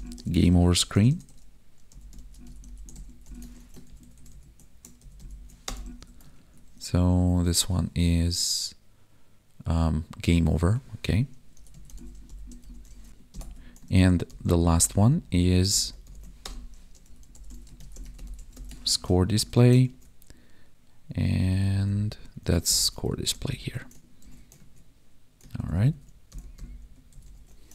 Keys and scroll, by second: 3.5 ctrl+s, 3.8 ctrl+Right, 4.9 ctrl+shift+Right, 5.8 ctrl+s, 6.3 ctrl+Tab, 10.5 ctrl+Tab, 13.3 alt+shift+Down, 13.9 ctrl+s, 14.2 ctrl+Left, 15.7 Left, 18.8 ctrl+s, 19.2 ctrl+Right, 19.8 ctrl+Tab, 21.4 Down, 22.6 ctrl+Right, 23.2 ctrl+shift+Left, 24.2 ctrl+c, 24.5 ctrl+Tab, 25.6 ctrl+Right, 26.3 Left, 27.1 ctrl+shift+Right.